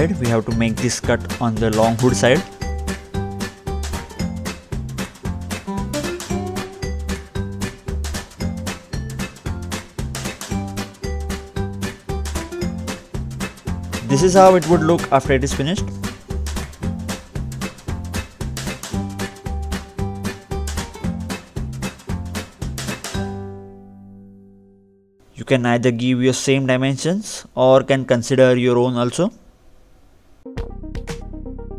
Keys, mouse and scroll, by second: 1.1 ctrl+o, 2.5 click, 2.8 BackSpace, 3.5 BackSpace, 5.7 BackSpace, 6.8 click, 6.9 double click, 7.6-7.9 scroll down 1, 7.9-8.7 scroll up 2, 8.7 click, 8.9 double click, 13.1 middle click, 13.5 scroll up 2, 14.1-14.6 scroll down 2, 14.6 middle click, 15.0-15.4 scroll down 2, 16.5 click, 17.1-17.5 scroll up 2, 17.8 middle click, 18.4 scroll down 2, 20.1 click, 23.1 click, 23.5-24.4 scroll down 2, 24.9 scroll, 25.0 click, 27.3-28.4 scroll up 1, 28.4 scroll up 1, 28.7 click, 29.4 ctrl+8, 30.0 scroll down 2, 31.1 scroll up 1, 31.3-31.7 scroll down 1.